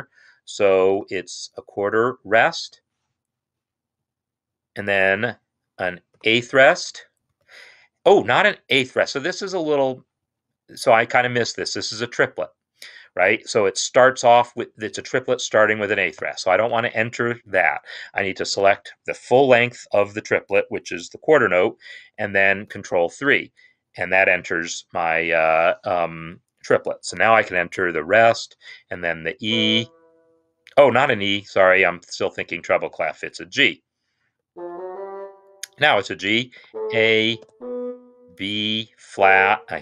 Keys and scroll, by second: 0.8-1.4 typing, 6.5-7.2 typing, 16.1 ctrl+z, 18.4 5, 22.5 ctrl+3, 28.1 0, 29.3 typing, 34.3 Up, 34.6 Up, 36.4 a, 37.2 b, 38.9 Down.